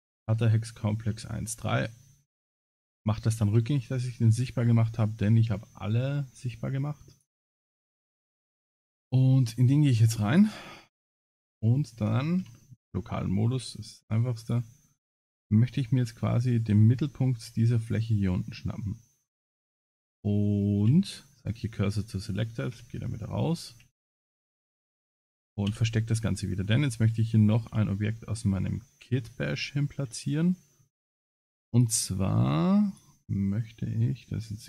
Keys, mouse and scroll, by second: 2.4 ctrl+z, 4.7 ctrl+z, 5.0 scroll down 2, 7.2 click, 8.4 click, 8.9 Tab, 9.2 middle click, 9.9 3, 10.3 click, 11.1 middle click, 12.4 KP_Divide, 13.1 middle click, 14.4 click, 15.3 scroll up 2, 16.1 scroll down 1, 16.2 scroll down 1, 17.4 shift+click, 18.6 middle click, 20.1 shift+s, 21.6 middle click, 23.7 a, 24.1 scroll down 5, 24.5 Tab, 25.1 middle click, 25.7 h, 26.1 scroll down 4, 26.4 scroll up 1, 26.7 scroll down 3, 27.2 shift+middle drag, 27.9-28.5 scroll down 4, 28.4-29.3 scroll up 12, 29.3 middle click, 30.2 shift+middle click, 30.9 shift+scroll down 1, 31.7 click, 32.9 click.